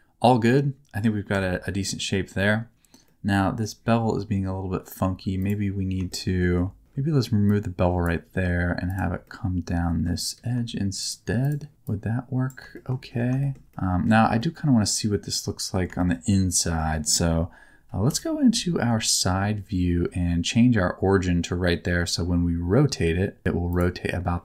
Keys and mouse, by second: 1.3 Tab, 1.8 middle click, 3.0 middle click, 5.0 2, 5.4 click, 6.1 middle click, 7.5 click, 9.2 middle click, 11.0 shift+click, 11.9 click, 12.7 shift+middle click, 13.4 shift+middle click, 13.6 Tab, 13.7 middle click, 14.4-15.7 middle drag, 16.0 shift+middle click, 16.3 middle click, 18.1 KP_1, 18.5 KP_3.